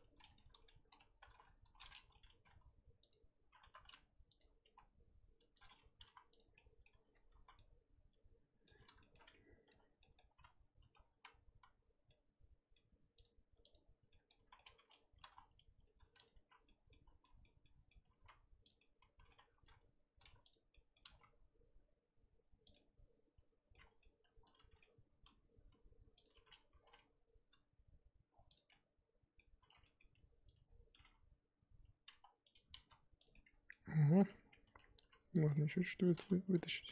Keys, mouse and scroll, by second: 0.9 ctrl+KP_Add, 2.3 s, 4.4 alt+click, 4.6 s, 6.3 scroll up 1, 6.5 scroll down 2, 6.5-6.9 middle drag, 6.9 Tab, 7.1-7.4 scroll down 1, 7.4 z, 7.5-9.2 middle drag, 9.2-9.6 scroll up 1, 9.6 Tab, 10.0 middle drag, 10.2-10.7 scroll up 2, 10.8 2, 12.1-13.2 middle drag, 13.2 alt+click, 13.7 alt+click, 14.1 middle drag, 14.3 z, 14.5-15.2 middle drag, 15.2 g, 16.5 z, 16.6-18.1 middle drag, 18.1 s, 18.8-19.5 middle drag, 19.5 g, 20.7 middle click, 21.0 s, 22.7-25.1 middle drag, 25.1 g, 28.7-29.8 middle drag, 29.8 scroll up 1, 29.8 middle click, 30.1 g, 30.6 scroll down 2, 30.9 g, 33.3 middle click, 34.0 scroll up 2, 34.2 Tab, 34.4 scroll down 1, 34.6 Tab, 34.8 scroll up 1, 35.0 3, 35.4 click, 35.5-36.5 middle drag, 36.5 g.